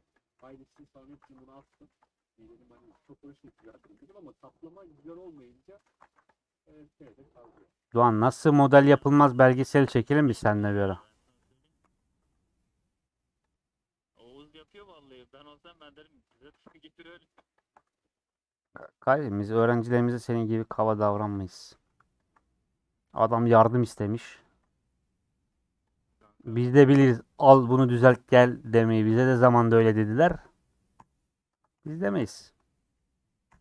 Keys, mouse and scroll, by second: 0.2 click, 0.3 g, 1.2 ctrl+z, 1.7 g, 2.5 middle click, 3.0 g, 3.7 a, 3.9 m, 4.3 middle click, 5.1 3, 5.2 click, 5.5 middle click, 6.0 alt+z, 6.2 click, 6.4 middle click, 7.3 shift+click, 8.1 ;, 8.6-11.4 middle drag, 11.7 Left, 11.8 g, 13.7 middle click, 14.3 scroll down 2, 14.4-16.5 middle drag, 16.5 3, 16.6 click, 17.0 middle click, 17.6 shift+Left, 18.0 middle click, 18.5 2, 18.7 click, 20.2-21.4 middle drag, 21.4 click, 22.9 middle click, 23.7 click, 25.3 middle click, 25.9 click, 27.4 middle click, 28.3 a, 29.9 u, 30.9 /, 31.5 Tab, 31.7 h, 32.3 click, 32.4 middle click, 32.6-33.0 scroll up 3, 33.5 /.